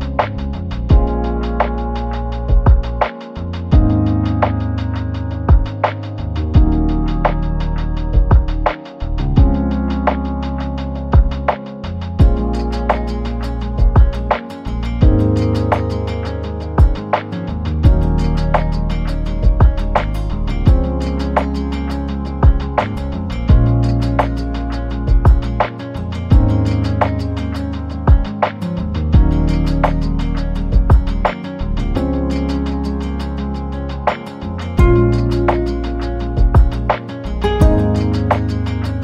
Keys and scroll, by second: 0.9 1, 1.3 0, 2.4-6.5 typing, 9.6 ctrl+z, 13.0 Return, 16.3 Return.